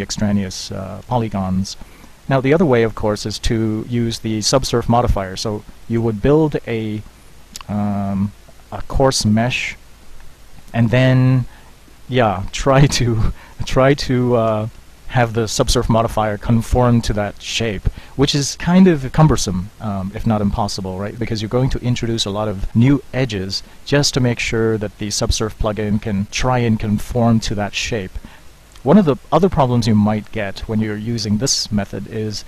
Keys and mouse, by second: 6.0 Tab, 17.8 z, 23.7-26.1 middle drag.